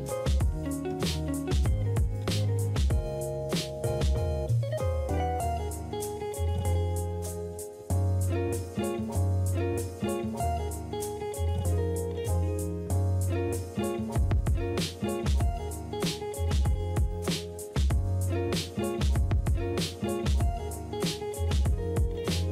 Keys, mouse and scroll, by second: 6.0 ctrl+middle click, 6.8 right click, 9.5-10.9 typing, 11.4 Return, 13.7 ctrl+d, 20.0 ctrl+d.